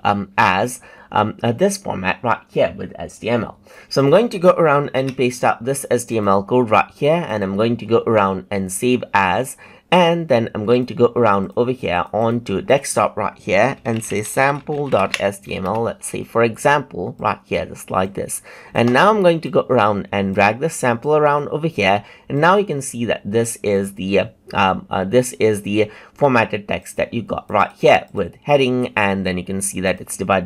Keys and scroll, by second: 4.9 ctrl+v.